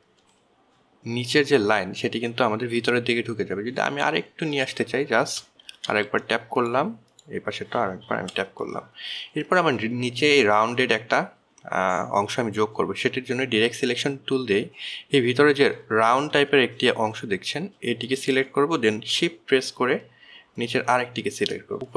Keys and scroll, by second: 1.1 shift+Right, 7.3 shift+Right, 9.8 shift+Left, 18.0 alt+1, 19.3 alt+1.